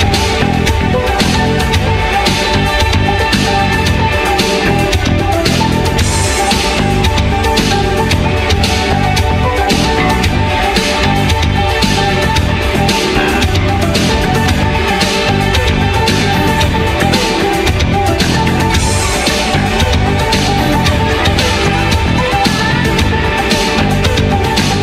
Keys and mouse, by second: 0.4 g, 1.4 ctrl+a, 2.9 g, 3.4 ctrl+a, 3.8 middle click, 4.1 g, 5.4 g, 5.8 middle click, 6.0 click, 6.7-9.5 typing, 7.2 click, 11.4 a, 11.9 click, 12.5 h, 13.3 a, 14.0 middle click, 14.7-16.0 middle drag, 16.6 z, 17.0 a, 17.6 q, 19.9-24.8 typing, 23.9 click.